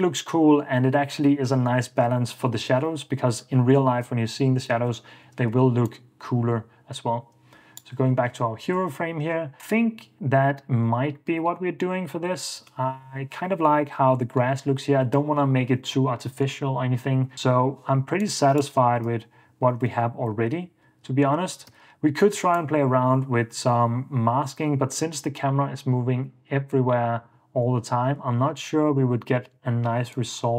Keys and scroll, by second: 5.0 ↺, 8.8 super+s, 19.3 super+d, 19.9 super+f, 20.6 super+d, 21.4 Escape, 21.9 super+s, 28.6 super+s.